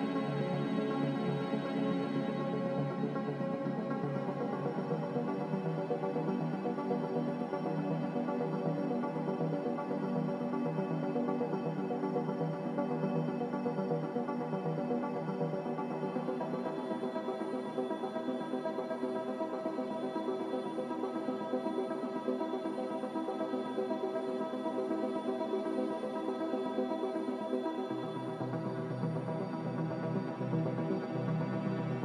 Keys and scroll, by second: 4.9 g, 8.0 Escape, 8.1 Escape, 8.2 Escape, 8.9 z, 15.9 BackSpace, 16.0 BackSpace, 17.1 ctrl+z, 17.5 F9, 23.0 z, 24.9 a.